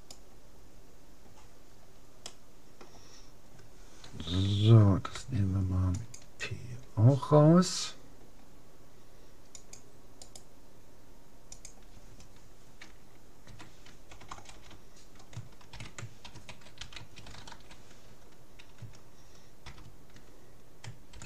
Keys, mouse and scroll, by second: 0.0-1.6 right drag, 1.6-4.0 middle drag, 5.2 p, 9.6-11.4 drag, 10.2-11.8 right drag, 14.4 BackSpace.